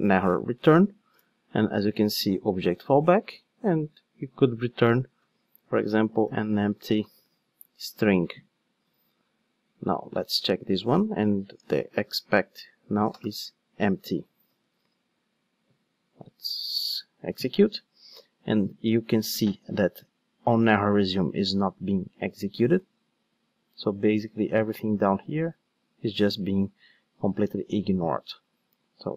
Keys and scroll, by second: 0.6 Return, 1.1 super+p, 14.5 ctrl+shift+d.